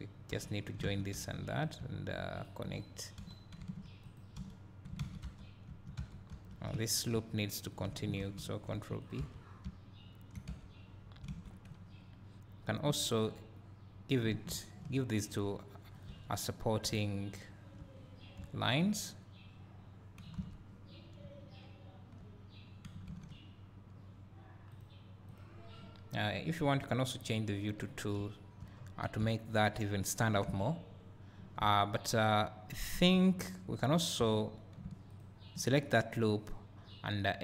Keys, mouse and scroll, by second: 0.4 j, 0.9 alt+a, 1.2 3, 1.6 click, 2.4 shift+click, 3.3 g, 4.2 right click, 4.5 f, 5.0 alt+a, 5.4 Tab, 5.7 `, 6.1 Tab, 6.4 2, 7.0 alt+click, 7.7 alt+shift+click, 8.7 ctrl+e, 9.1 click, 9.3 Tab, 9.6 `, 10.6 Tab, 10.9-11.3 scroll up 2, 11.3 alt+a, 12.6 ctrl+r, 14.2 click, 14.5 ctrl+r, 16.0 click, 16.2 Tab, 16.6 scroll down 1, 16.9 `, 18.0-18.4 scroll up 2, 21.0 scroll down 1, 21.2 `, 27.4-31.7 drag, 28.2 `, 28.8-29.2 scroll up 2, 29.2 `, 31.7 Tab, 32.6-33.3 scroll up 2, 33.3 scroll down 2, 33.8-34.3 scroll up 1, 34.3 3, 35.2 alt+click.